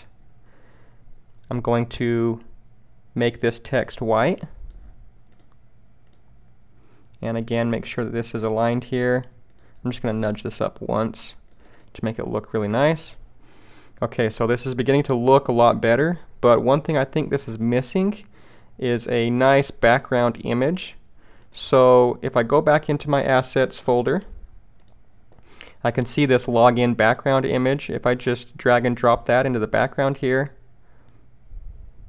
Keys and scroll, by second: 10.5 shift+Up.